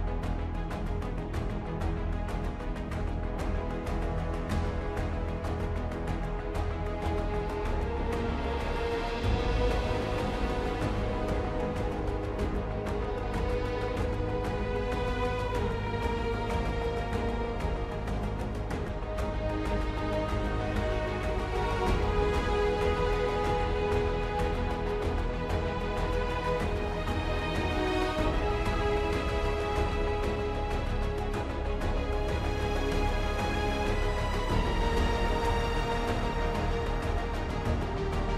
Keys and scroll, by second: 8.4 ctrl+d, 17.1 ctrl+d.